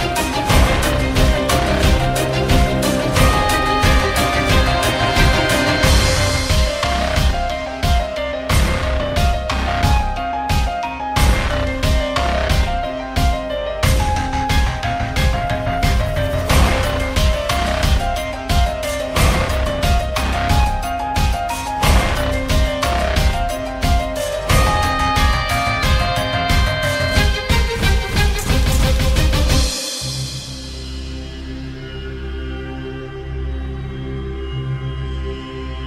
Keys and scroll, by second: 0.0-4.3 typing, 0.4 F3, 6.9-7.8 typing, 9.6-12.1 typing, 13.6-15.3 typing, 16.9 w, 18.3-19.2 typing, 27.4-28.3 typing, 30.2 Delete, 31.1-35.8 typing.